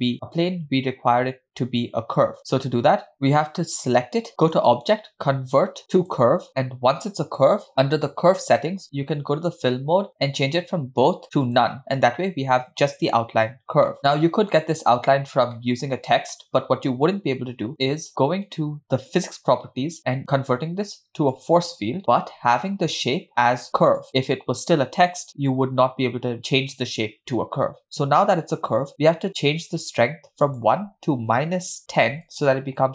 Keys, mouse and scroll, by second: 4.6-6.5 drag, 10.3-11.6 drag, 13.6-13.9 scroll down 1, 14.0-14.6 middle drag, 15.6-16.2 middle drag, 16.3 scroll down 2, 19.1 click, 21.4 click, 23.1-24.1 drag, 25.6-26.3 scroll up 2, 25.7-26.3 middle drag, 26.3-27.4 scroll up 1, 27.7 scroll down 2, 30.5-32.4 drag.